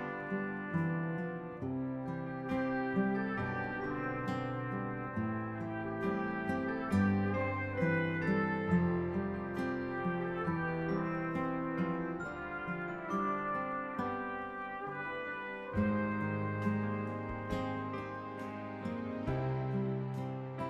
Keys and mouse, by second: 0.9 click, 1.8 click, 3.2 right click, 4.9 click, 6.4 click, 7.8 click, 11.6 click, 13.6 click, 14.7 click, 14.8 click, 16.1 click, 18.4 click, 20.4 click.